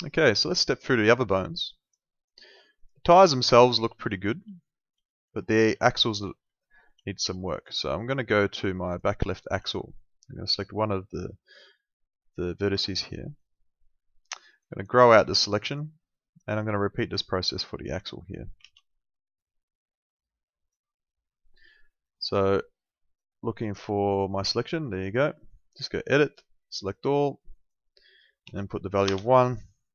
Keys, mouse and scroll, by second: 3.2 alt+middle click, 4.5 alt+middle click, 5.8 alt+middle click, 6.5 alt+middle click, 7.3 alt+middle click, 8.9 click, 9.2 alt+middle click, 10.4 click, 13.3 click, 19.4 click, 23.2 click, 25.8 click, 28.5 1, 29.1 Return, 29.1 KP_Enter.